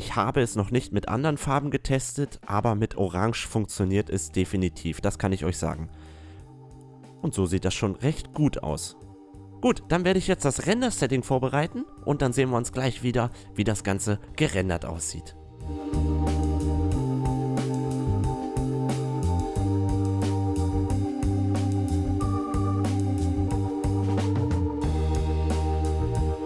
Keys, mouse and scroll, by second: 0.0-3.7 middle drag, 3.7-5.6 drag, 5.6-5.9 middle drag, 5.9 a, 6.2 middle click, 8.5 click, 10.1-11.2 middle drag, 12.9 click, 14.1-15.9 drag, 15.9 middle click, 16.3 middle click, 16.9 click, 17.8 BackSpace, 18.6 middle click, 18.6-19.1 drag, 19.1 r, 19.6 click, 20.4 right click, 21.2 click, 21.6 click, 22.0 right click, 22.1 click, 22.4 middle click, 22.8 click, 22.8 right click, 23.1 middle click, 23.7 middle click, 24.1 click, 24.3 click, 24.7-26.3 typing, 26.0 click.